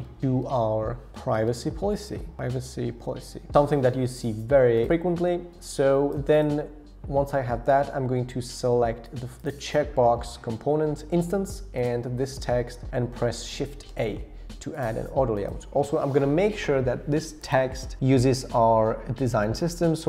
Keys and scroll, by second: 0.0-3.6 typing, 13.9 shift+a.